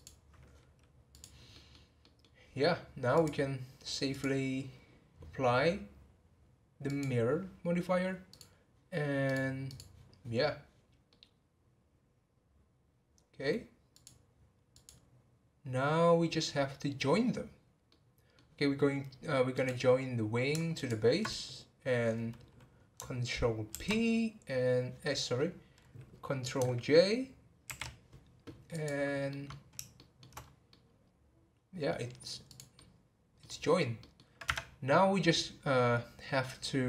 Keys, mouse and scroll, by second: 1.1 click, 1.5-3.1 middle drag, 3.1 click, 4.1-7.1 drag, 8.3 click, 9.2-11.1 drag, 11.1-13.9 middle drag, 13.9 click, 14.7 click, 17.9-19.5 middle drag, 19.5 click, 20.7 ctrl+click, 23.7 ctrl+p, 27.6 ctrl+j, 29.3-30.4 middle drag, 30.4 scroll up 1, 30.7-32.4 middle drag, 32.4 click, 32.7-33.5 middle drag, 33.5 scroll down 1, 34.0-34.4 middle drag, 34.4 Tab.